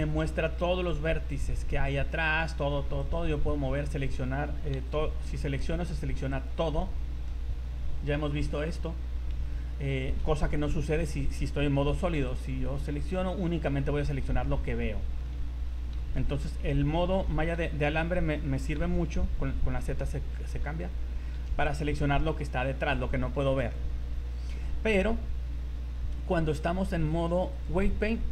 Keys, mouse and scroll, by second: 2.3 click, 3.0 right click, 3.6 scroll down 2, 4.7 c, 6.9 middle click, 7.3 middle click, 9.3 KP_1, 10.2 z, 11.0 right click, 11.9 c, 13.3 middle click, 16.0 ctrl+z, 17.1 KP_1, 17.8 a, 18.8 z, 20.3 z, 20.6 z, 21.4 c, 23.8 scroll down 2, 24.1 scroll up 3, 26.3 z, 27.5 click.